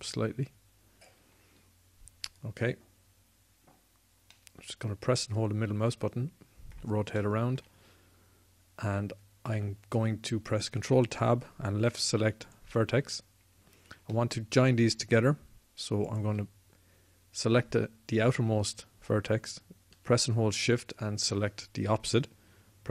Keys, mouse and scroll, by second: 5.0-6.3 drag, 11.5 ctrl+Tab.